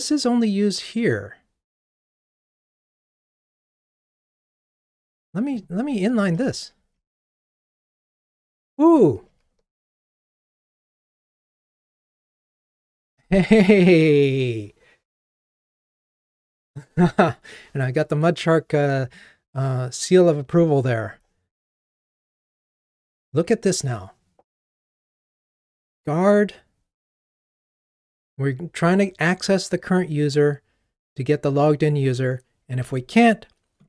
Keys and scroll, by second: 7.0 alt+super+n.